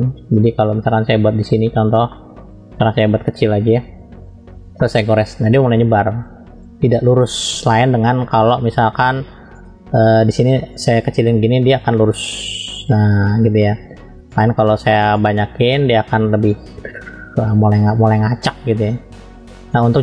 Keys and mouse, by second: 1.1 shift+middle click, 2.1 middle click, 3.6-4.5 typing, 4.8-6.6 drag, 7.1 ctrl+z, 9.7-11.9 drag, 12.3 click, 13.4 ctrl+z, 14.3-16.1 drag, 16.5-17.7 drag, 18.0 ctrl+z, 18.9 click.